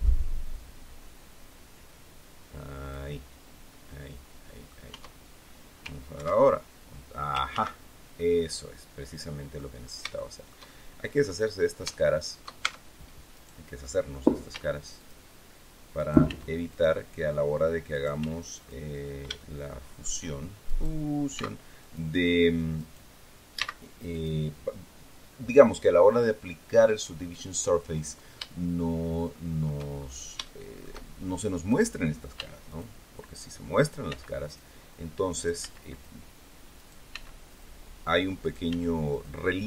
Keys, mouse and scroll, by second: 3.3 scroll down 1, 3.6-4.8 drag, 4.8 Tab, 6.1 ctrl+2, 7.4 ctrl+z, 8.1-9.7 drag, 9.9 shift+scroll up 1, 10.1-11.3 shift+drag, 11.3-11.6 scroll up 1, 11.8 shift+middle click, 12.5 shift+Tab, 13.3 right click, 14.4 x, 14.9 click, 15.9 right click, 16.2 x, 16.6 click, 17.8 right click, 18.1 x, 18.5 click, 19.3 shift+middle click, 20.6 right click, 21.3 x, 21.7 click, 22.7 right click, 23.5 x, 24.0 click, 28.7-29.8 shift+drag, 29.9-30.3 shift+scroll up 2, 30.4 shift+middle click, 31.5 right click, 32.3 x, 32.6 click, 33.7 right click, 34.0 x, 34.4 click, 35.2 right click, 35.5 x, 35.8 click, 36.7 right click, 37.0 x, 37.4 click, 38.4 right click, 38.6 x, 39.0 click, 39.5 middle click.